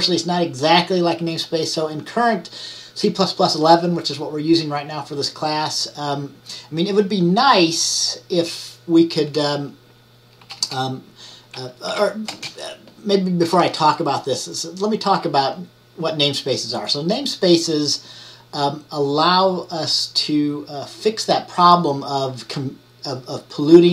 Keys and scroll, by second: 10.5 typing, 12.0-12.4 typing.